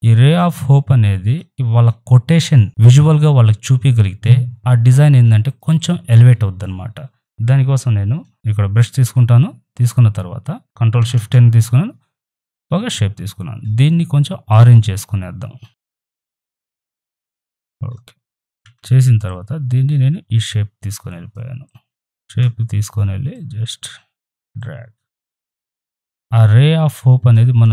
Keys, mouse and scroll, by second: 5.4 right click, 5.7 click, 8.3 typing, 8.8 click, 10.6 ctrl+z, 11.0 ctrl+shift+n, 11.3 Return, 12.3 click, 14.5-17.4 drag, 18.6 v, 19.2-22.0 drag, 22.0 ctrl+t, 23.3-27.7 alt+drag.